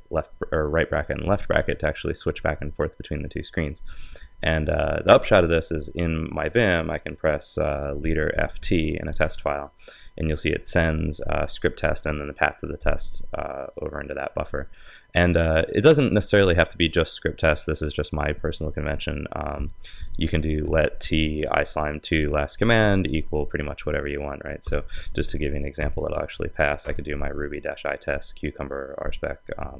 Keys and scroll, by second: 1.2 super+[.